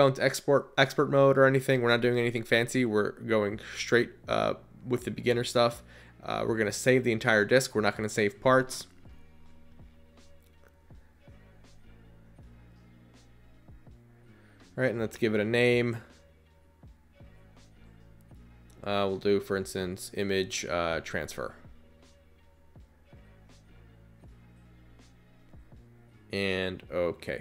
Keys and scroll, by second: 4.5 Return, 11.9 Return, 21.7-25.0 typing.